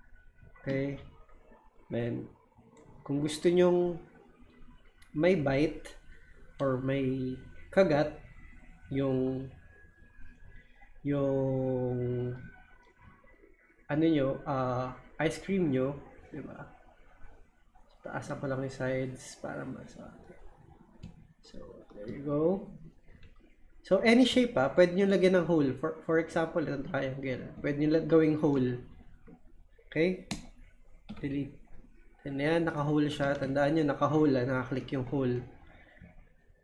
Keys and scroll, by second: 31.1 Delete.